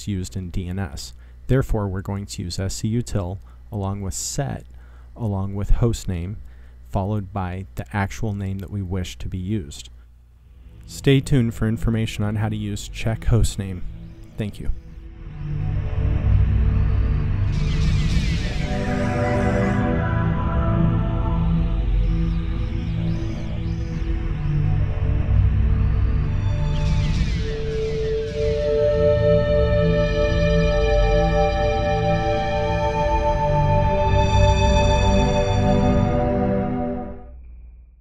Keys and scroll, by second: 0.0-1.7 typing, 2.9-4.2 typing, 8.0 typing, 9.8-10.5 typing.